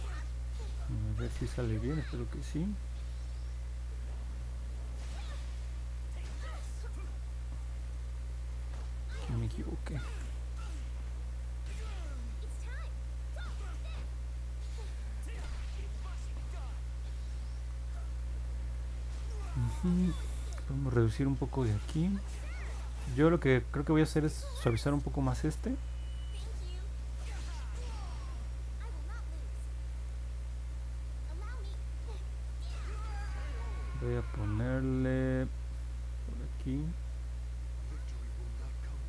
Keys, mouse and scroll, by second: 3.2 click, 3.9 click, 5.0 click, 5.6 click, 6.1 click, 6.7 click, 9.2 ctrl+z, 9.7 ctrl+z, 10.6 click, 11.1 click, 11.6 click, 13.2 click, 13.6 click, 14.0 click, 14.4 click, 14.9 click, 15.3 click, 16.4 click, 17.0 click, 24.3 click, 26.6 click, 27.2 click, 29.3 click, 31.1 click, 36.5-38.0 drag.